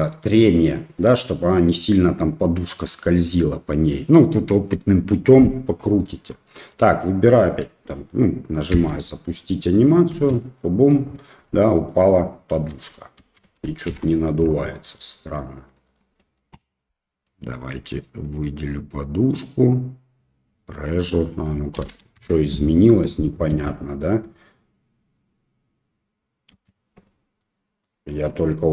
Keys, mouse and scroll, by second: 5.7 middle click, 6.7 click, 7.9 middle click, 8.7 space, 10.2 space, 10.4-10.9 middle drag, 11.4-11.9 middle drag, 12.5 space, 13.3 space, 13.9 shift+Left, 14.7 middle drag, 15.3 click, 15.9 click, 21.1-22.7 drag, 23.0 middle click, 23.5 space, 26.6 space, 27.4-27.9 middle drag, 28.2 click.